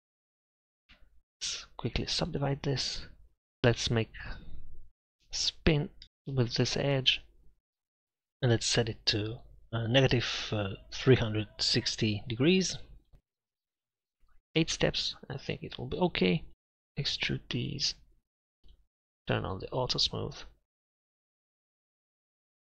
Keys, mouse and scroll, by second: 1.3 ctrl+r, 6.0 ctrl+z, 7.7-9.0 drag, 13.4 middle click, 15.5 middle click, 16.5 z, 16.5 a, 17.1 e, 21.9 z, 22.2 z.